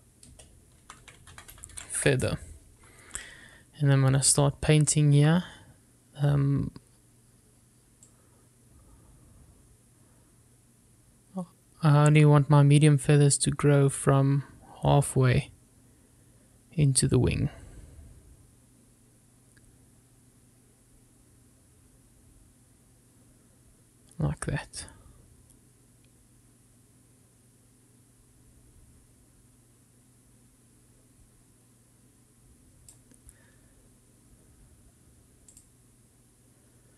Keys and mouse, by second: 9.2-34.1 drag.